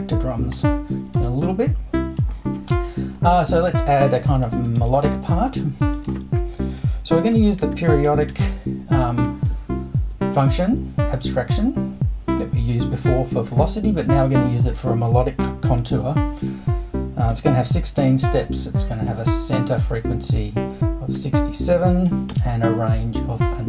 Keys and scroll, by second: 4.8 super+i, 7.1-9.4 typing, 15.4 i, 15.8 6, 17.3 space, 18.6-19.6 typing, 21.1-22.8 typing.